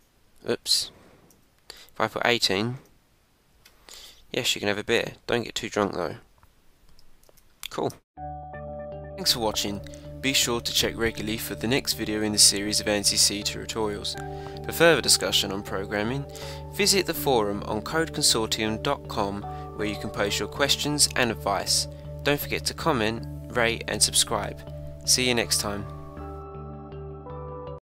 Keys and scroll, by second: 0.6 Up, 1.3 Return, 7.3 super+Tab.